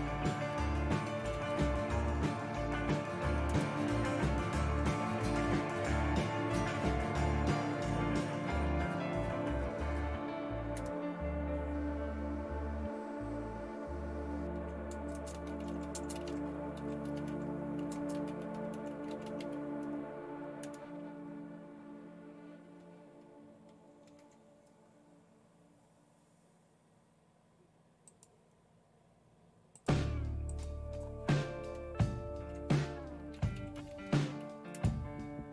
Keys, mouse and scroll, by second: 1.3-3.8 typing, 15.3-21.2 typing, 23.8-24.6 typing.